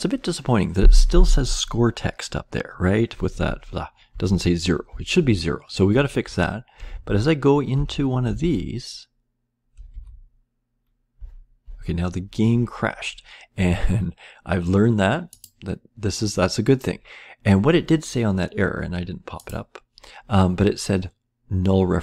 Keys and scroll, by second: 4.0 Down, 4.8 Left, 5.8 Right, 6.8 Left, 7.7 Down, 8.2 Left, 9.8 Left, 11.1 Down.